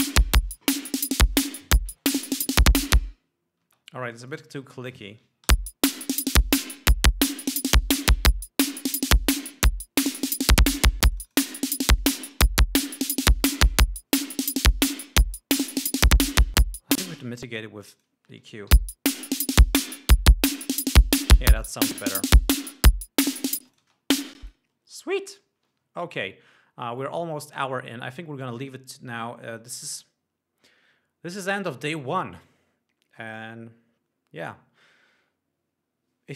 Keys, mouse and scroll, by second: 4.3 space, 4.6-5.1 drag, 6.1 l, 6.6 click, 11.7 click, 13.5 click, 16.2 click, 17.5 space, 18.4 click, 19.3 l, 21.8-22.9 drag, 24.2 space, 24.3 click, 25.0 click.